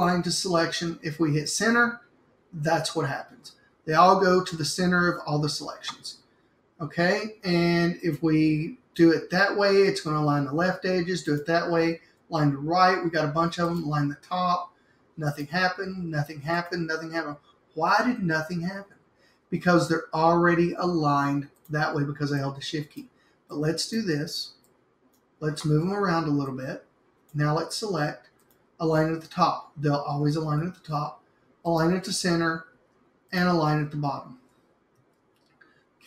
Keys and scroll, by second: 10.4 super+z, 12.1 super+z, 30.9 super+z, 32.9 super+z, 35.0 super+z.